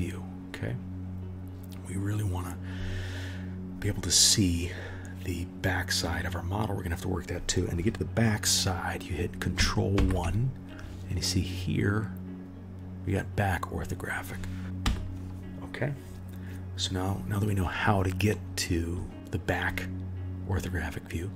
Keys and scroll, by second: 9.9 ctrl+KP_1, 14.8 KP_1.